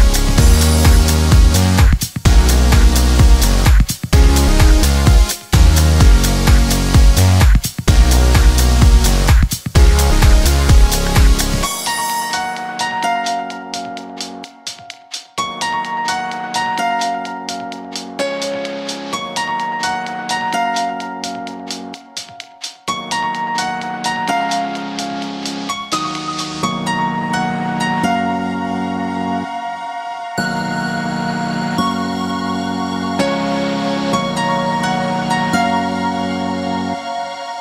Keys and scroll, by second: 27.5 Escape, 29.9 space, 32.0 Escape, 34.1 Escape.